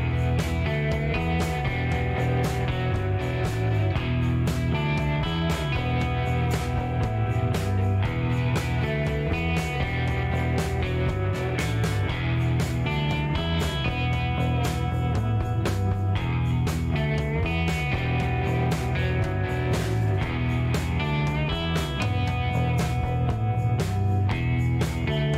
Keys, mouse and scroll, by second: 1.0 shift+right click, 2.8 shift+right click, 3.9 shift+scroll up 1, 4.3 shift+right click, 5.8 shift+middle click, 6.2 shift+right click, 9.2 click, 10.7 ctrl+click, 11.2 ctrl+shift+middle click, 13.6 ctrl+click, 14.9 click, 17.2 scroll up 1, 19.1 click, 21.1 click, 24.1 click, 25.0 shift+right click.